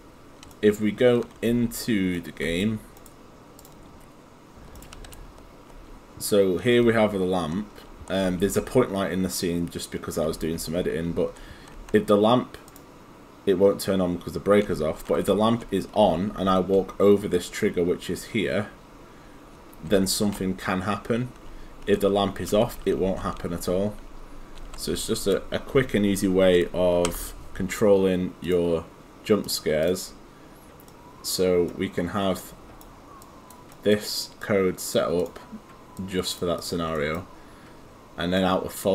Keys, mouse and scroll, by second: 0.0 click, 0.5 right click, 1.6 right click, 3.6 click, 4.7-5.6 typing, 4.8 right click, 8.3 s, 10.0-11.8 typing, 12.7 click, 14.7 s, 15.2 w, 16.0 s, 19.9 w, 21.5 s, 22.6 s, 23.0 s, 24.6 d, 27.3 Escape, 28.5 click, 30.9 right click, 33.2 click, 33.7 right click, 34.4 click, 37.0 right click, 38.4 click.